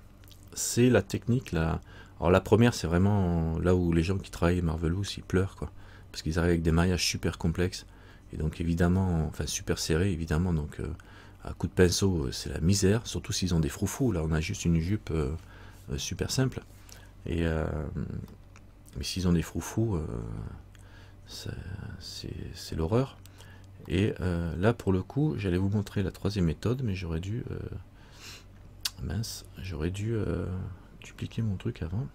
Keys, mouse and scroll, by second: 18.6 middle click, 20.6-21.3 scroll down 1, 24.1 middle click, 25.2 middle click, 26.0-27.1 scroll down 1, 27.6-28.1 scroll up 1, 28.3-29.0 scroll up 5.